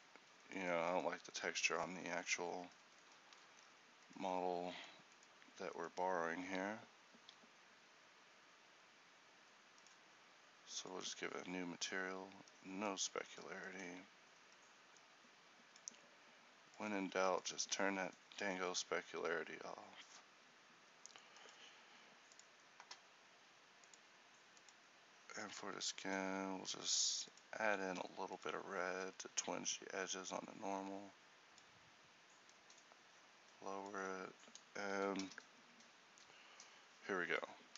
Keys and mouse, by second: 3.4 z, 6.6 z, 9.9-35.3 drag.